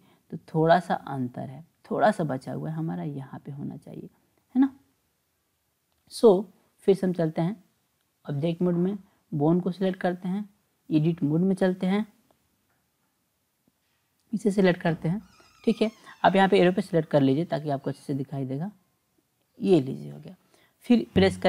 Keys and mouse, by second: 4.1 click, 7.6-8.5 drag, 9.1 click, 10.7-12.0 drag, 13.8 click, 14.7 click, 16.6 click, 18.0-19.8 drag, 21.1 e.